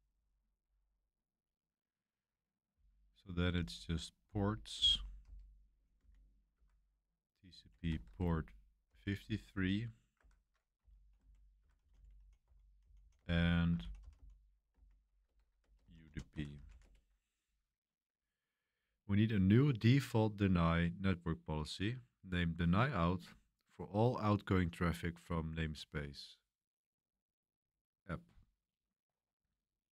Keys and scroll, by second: 0.1-0.4 typing, 2.7-9.5 typing, 6.5 Escape, 10.1 Escape, 10.5-17.3 typing.